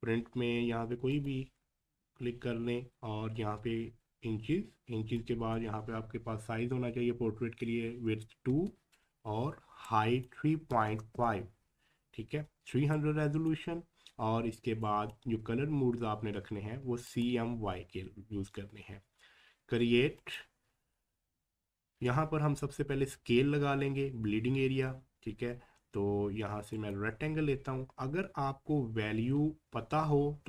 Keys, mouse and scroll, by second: 5.1 click, 5.2-9.8 drag, 9.8-12.9 drag, 12.9-14.8 drag, 17.1 click, 20.2 click, 21.9 scroll down 1, 26.7 click.